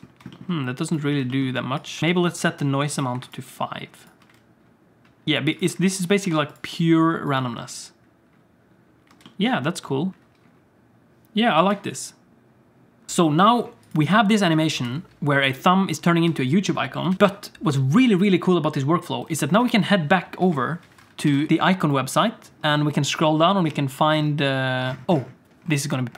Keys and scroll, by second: 1.9 Tab, 2.0 Tab, 4.2-5.2 space, 7.5 space, 9.2 space, 10.1 shift+Left, 11.7 shift+Left, 13.1 ctrl+s, 14.5 ctrl+s, 14.7 space, 16.3 space, 17.1 ctrl+s.